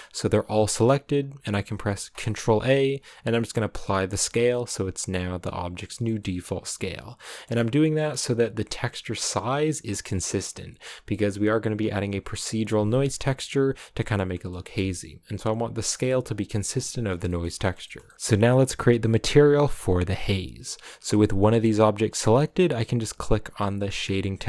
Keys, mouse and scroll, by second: 3.7 ctrl+a, 4.1 scroll down 1, 4.3 a, 4.4-5.7 middle drag, 5.7 scroll down 1, 5.8 shift+middle click, 6.4-7.2 scroll up 2, 7.2-9.0 middle drag, 9.0-14.2 right drag, 14.2 scroll up 1, 14.3-16.2 shift+middle drag, 16.2-17.0 scroll down 1, 17.0 scroll down 1, 17.2-24.4 shift+middle drag.